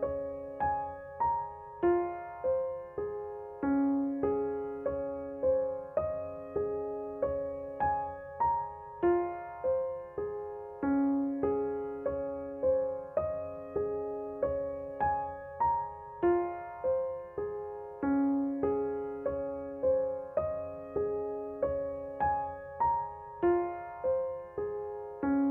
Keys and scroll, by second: 15.0 Tab, 18.1 a.